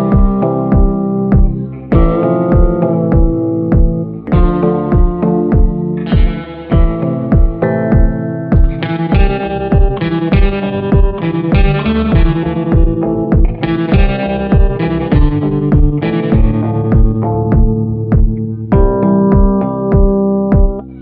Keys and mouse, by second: 1.3 [, 1.8 click, 1.8 [, 2.5 ctrl+z, 2.7 ], 2.9 click, 3.9 ctrl+z, 3.9 ], 4.3 click, 4.3 ], 5.5 ctrl+z, 6.6 shift+click, 6.7 shift+middle click, 7.0 middle click, 7.5 ctrl+i, 8.5-11.2 typing, 13.0 click, 14.0-14.6 ], 14.6-15.8 drag, 16.1 a, 16.5-17.8 middle drag, 18.3 middle click, 19.1 shift+middle click, 19.6 ctrl+i, 20.2 b.